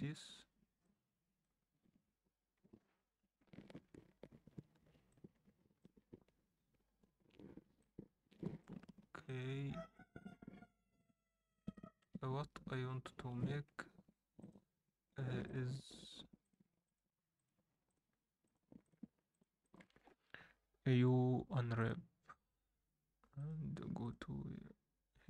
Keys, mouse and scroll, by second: 11.3 scroll down 2, 11.7 alt+shift+middle drag, 14.2 Tab, 14.3 click, 15.4 shift+click, 16.0 shift+click, 16.4 shift+click, 16.8 shift+drag, 17.4-19.2 shift+drag, 19.3 shift+click, 19.6 shift+drag, 20.9 u.